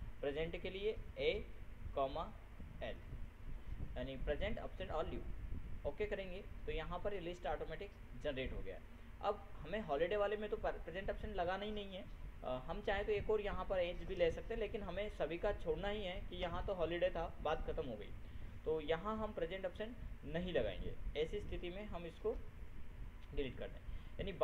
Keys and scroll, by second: 3.4 ctrl+shift+l, 22.7 ctrl+Delete.